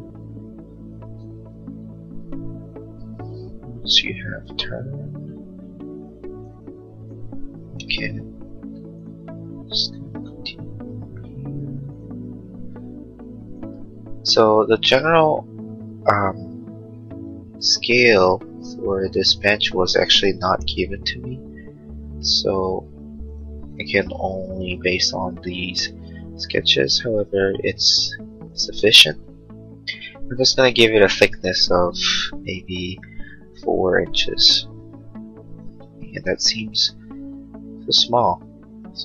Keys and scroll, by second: 7.9 l, 13.2 a, 13.9 a, 20.2 l, 34.0 4, 34.3 Return.